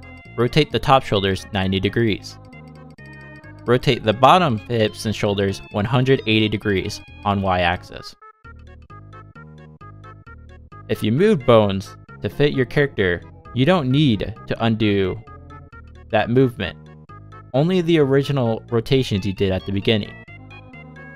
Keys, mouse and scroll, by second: 1.8 click, 2.2 r, 4.6 click, 4.9 r, 6.7 middle click, 7.4 click, 7.9 shift+click, 8.2 shift+click, 8.5 shift+middle click, 9.0 shift+click, 9.4 middle click, 9.5 r, 12.2 middle click, 12.5 shift+middle click, 12.9-13.7 scroll up 1, 13.7 scroll up 1, 13.7 click.